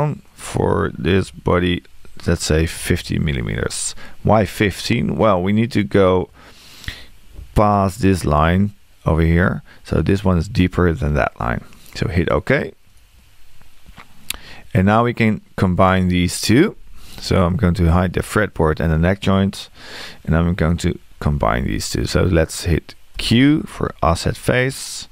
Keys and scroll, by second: 2.8 space, 23.2 q.